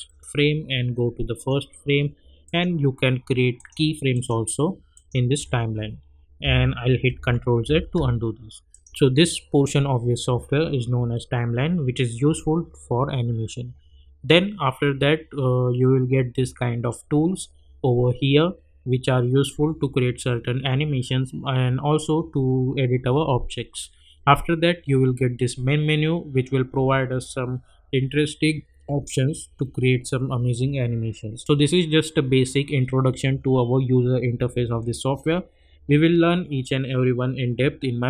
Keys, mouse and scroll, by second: 8.0 ctrl+z, 8.7 click, 31.4-32.3 scroll up 1.